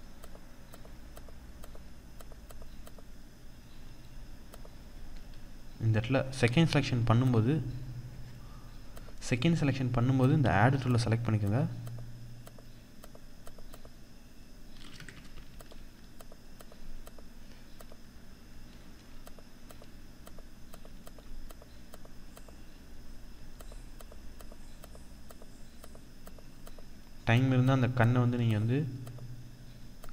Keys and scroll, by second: 14.6 BackSpace.